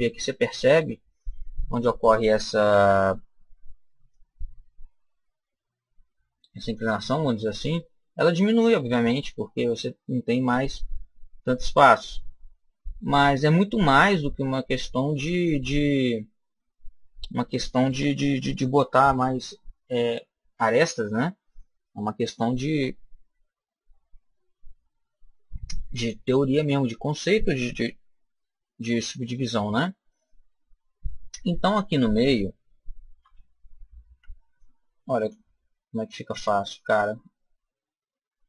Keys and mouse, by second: 2.6 Tab, 4.0-5.8 drag, 7.6-9.6 middle drag, 10.8-12.7 middle drag, 27.8 KP_7, 33.1 a, 34.0 b, 36.0-37.8 drag.